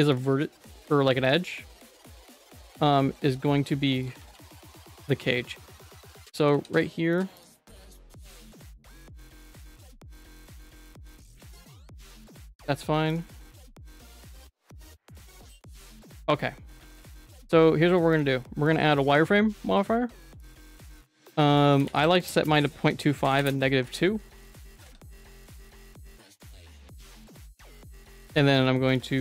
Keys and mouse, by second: 0.1 alt+shift+click, 0.9 alt+shift+click, 1.2 alt+shift+click, 3.0 ctrl+x, 3.9 alt+click, 4.2 ctrl+x, 4.5 shift+middle click, 5.1 middle click, 6.0 ctrl+z, 6.2 ctrl+z, 6.4 ctrl+z, 6.5 ctrl+z, 7.4 alt+click, 8.3 alt+shift+click, 8.7 middle click, 10.2 ctrl+x, 10.5 Tab, 10.7 middle click, 11.0 Tab, 11.2 middle click, 14.3 alt+shift+click, 14.7 Tab, 14.9 Tab, 15.0 middle click, 16.2 Tab, 16.8 ctrl+s, 18.7-20.5 drag, 21.1 click, 21.6 click, 22.5 click, 24.4 middle click, 24.8 ctrl+s, 25.2 Tab, 25.4 1, 25.6 click, 26.2 g, 26.9 g, 27.9 middle click, 29.1 g.